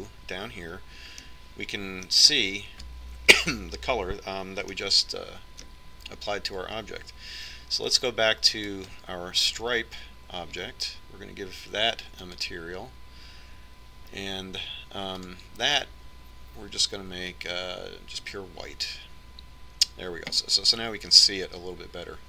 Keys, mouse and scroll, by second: 2.8-5.8 middle drag, 6.3-8.1 middle drag, 10.4-13.9 right drag, 13.9-15.6 drag, 16.8-22.2 drag.